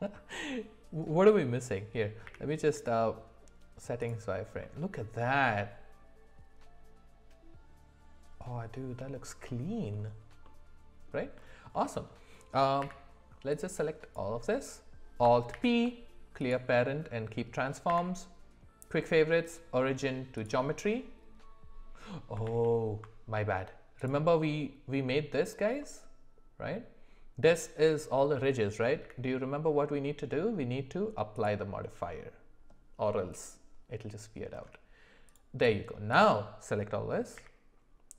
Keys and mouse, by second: 0.2 middle click, 2.3 q, 4.6-9.2 middle drag, 9.5 middle click, 10.4 middle click, 11.7 middle click, 12.8 w, 14.2 click, 15.5 alt+p, 17.9 q, 22.5 ctrl+z, 24.0 click, 25.8-28.0 middle drag, 29.0 q, 35.3 click, 35.6 click, 37.4 q.